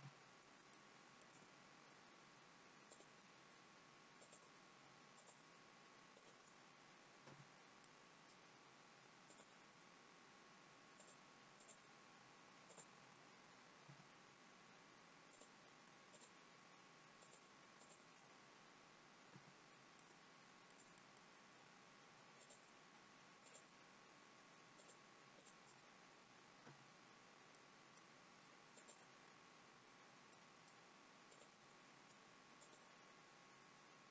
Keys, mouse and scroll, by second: 0.1 f, 0.7 shift+middle click, 3.0 click, 4.3 shift+click, 6.1 shift+click, 7.4 shift+click, 7.4 f, 8.0 middle click, 9.4 click, 11.1 shift+click, 12.4 shift+click, 13.9 shift+click, 13.9 f, 15.3 click, 16.2 shift+click, 18.4 shift+click, 19.4 f, 20.4 middle click, 21.0 middle click, 21.0-22.5 scroll up 1, 22.5 click, 23.4 shift+click, 25.4 shift+click, 26.7 f, 27.5 middle click, 28.9 click, 30.4 middle click, 31.3 click, 32.8 shift+click.